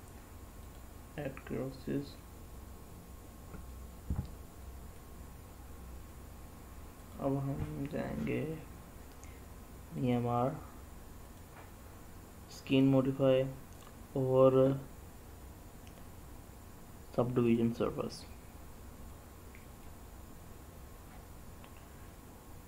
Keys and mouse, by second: 1.5 middle click, 3.5-4.8 middle drag, 6.9-10.0 drag, 11.2-12.6 drag, 13.6-17.4 drag, 18.9 middle click.